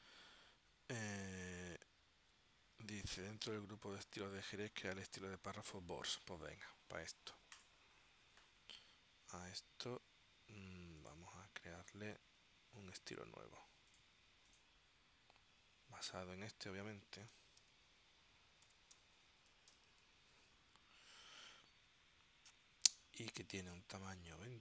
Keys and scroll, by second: 17.5-20.6 typing.